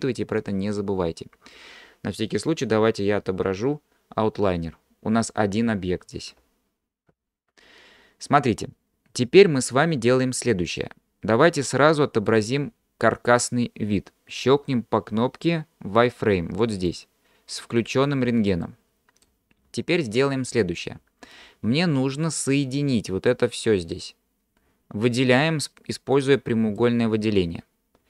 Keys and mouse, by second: 3.3 ctrl+space, 7.2 ctrl+space, 11.0-12.3 middle drag, 18.8 middle click, 25.4-26.8 drag.